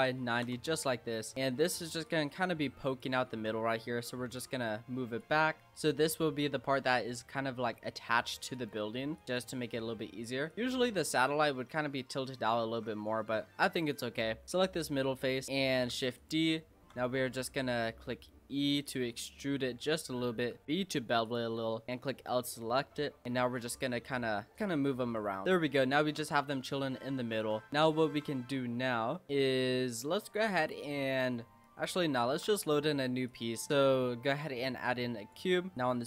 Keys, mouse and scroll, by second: 1.2 s, 1.3 middle click, 2.1 click, 3.3 ctrl+z, 4.3 click, 5.5 s, 5.6 middle click, 6.0 scroll up 1, 6.2 Tab, 6.8 middle click, 7.6 s, 9.1 click, 9.5 scroll down 4, 9.7 middle click, 10.5 click, 10.5 middle drag, 10.8-12.1 scroll down 2, 12.1-12.7 middle drag, 12.7 Tab, 13.0 scroll up 3, 13.2 middle click, 13.8 click, 14.1-15.4 scroll up 8, 15.4-15.9 scroll down 5, 15.9 shift+d, 16.6 shift+middle click, 16.9 shift+scroll down 1, 17.0-17.4 scroll up 4, 17.4 middle click, 18.2 e, 19.1 middle click, 19.6-20.0 scroll up 3, 20.0 scroll down 1, 20.1-20.6 scroll up 1, 20.6 ctrl+b, 21.9 click, 22.0 l, 22.3 middle click, 22.9-23.2 scroll down 1, 23.2 click, 24.5 click, 25.1 scroll down 1, 25.4-25.8 middle drag, 25.8 scroll down 2, 26.0 Tab, 26.5 Tab, 26.8-27.4 middle drag, 27.4 Tab, 27.7 shift+middle click, 28.4-29.3 scroll up 3, 29.3-30.5 middle drag, 30.5 click, 31.3 middle click, 32.3 shift+a, 33.7 s, 34.8 click, 35.5 middle click, 35.7 click.